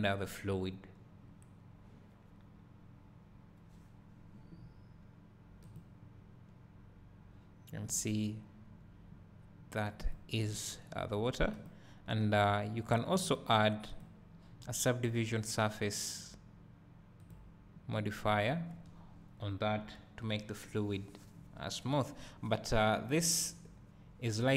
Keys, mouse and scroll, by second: 23.3-24.5 drag.